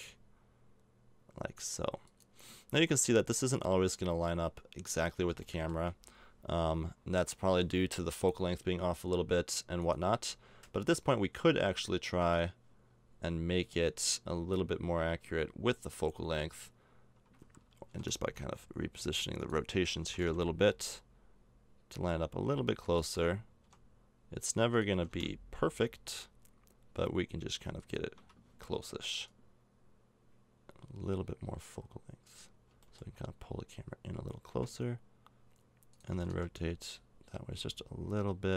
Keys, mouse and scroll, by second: 4.6 middle click, 4.7 click, 5.4-9.8 middle drag, 9.8-11.4 right drag, 11.5 click, 12.2-14.1 drag, 17.9 g, 20.0 r, 23.6 g, 24.9 r, 32.6 g, 36.1 r.